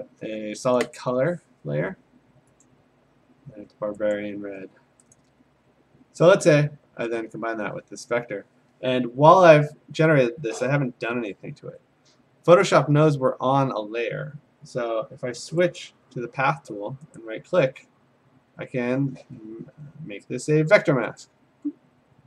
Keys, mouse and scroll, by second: 0.4 ctrl+z, 1.0 click, 2.6 click, 5.2 click, 7.4 click, 15.8 click, 17.2 right click, 21.2 click.